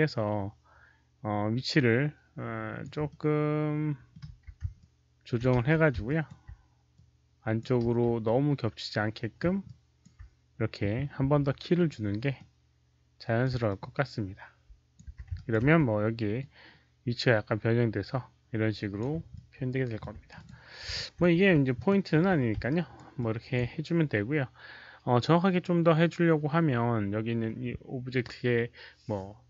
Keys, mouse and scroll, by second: 3.0-4.0 middle drag, 3.8-7.8 typing, 4.0 ctrl+click, 4.7 ctrl+alt+click, 6.0 alt+click, 6.2 middle click, 6.8 alt+click, 6.8 middle click, 8.1-9.3 alt+drag, 9.6 alt+click, 11.2 s, 11.6 alt+click, 11.6 z, 12.3-13.3 alt+drag, 12.3 middle click, 13.6-14.9 alt+drag, 14.6-18.6 typing, 15.2 alt+right click, 16.3-18.9 alt+drag, 16.3 alt+right click, 17.6 alt+right click, 19.2 alt+click, 20.3 click, 20.9-23.5 typing, 20.9 alt+click, 21.1 alt+right click, 21.7 click, 21.8 alt+right click, 22.6 alt+right click, 23.1 alt+click, 25.0-25.8 typing, 25.2 alt+click, 25.2 alt+right click, 25.8 alt+click, 27.2 click, 27.2 alt+click.